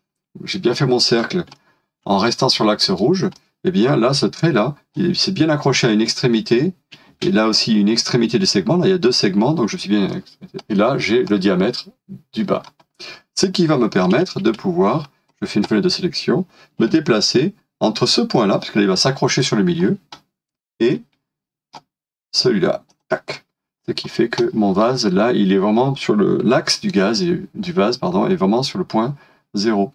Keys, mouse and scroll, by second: 1.5 shift+middle click, 10.0 space, 10.1 middle click, 12.8-13.5 scroll down 1, 13.5 middle click, 14.4 space, 19.8 scroll down 1, 20.9 middle click, 24.0 scroll down 1, 24.4 middle click.